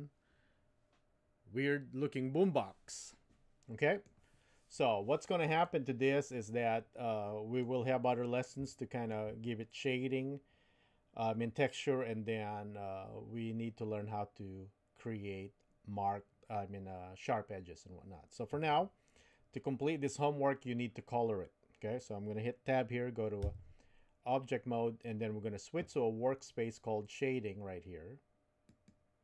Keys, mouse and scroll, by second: 5.8-7.7 middle drag, 8.7 shift+middle click, 23.4 Tab.